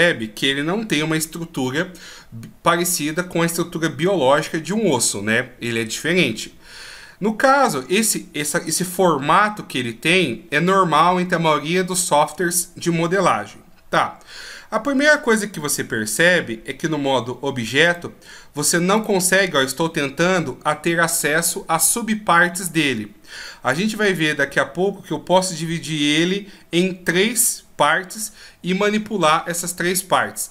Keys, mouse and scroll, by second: 0.6 shift+scroll up 1, 17.8 right click, 19.0 right click.